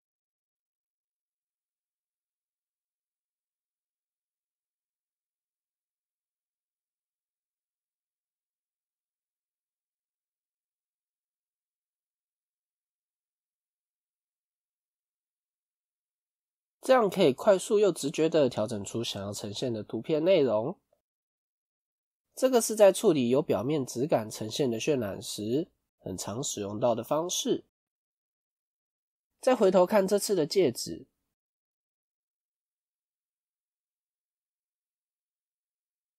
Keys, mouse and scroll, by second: 0.2 click, 4.5 click, 5.0 shift+click, 5.8 shift+click, 7.0 r, 13.9 middle click, 14.8 scroll down 3, 15.0 scroll up 1, 15.1 middle click, 16.6 middle click, 18.7 Tab, 19.2 middle click, 20.5 middle click, 24.4-24.8 scroll down 1, 24.8 middle click, 25.8 scroll up 2, 28.9-30.3 scroll down 2, 30.3 Tab, 30.9 click, 31.2-31.8 scroll down 4, 31.8 x, 34.4 click, 35.0-35.7 scroll down 4.